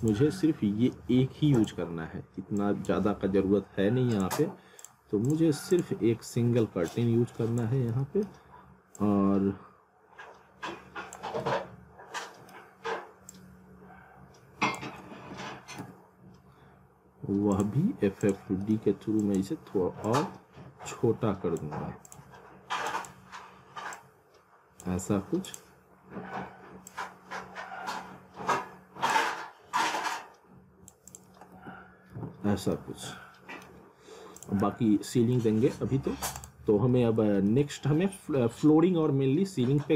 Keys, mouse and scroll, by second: 6.1 scroll down 1, 6.9 click, 7.7 z, 8.0 alt+middle click, 9.0 click, 11.4 middle click, 13.3 click, 15.1 alt+w, 15.8 z, 17.5 click, 18.6-19.2 scroll down 1, 19.2 click, 26.0-26.9 scroll up 1, 26.9 click, 30.0 click, 31.6 alt+w, 32.7 alt+middle click, 34.5 click, 34.6 z, 35.1 alt+middle click, 36.0-36.4 scroll down 1, 36.4 click, 36.7 scroll up 1, 36.9 alt+middle click, 37.7 alt+middle click, 39.0 alt+middle click.